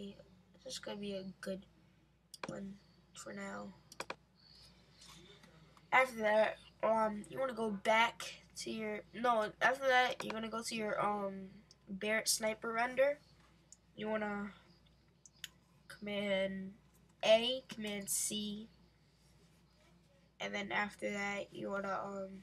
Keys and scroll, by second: 17.2 super+a, 17.9 super+c.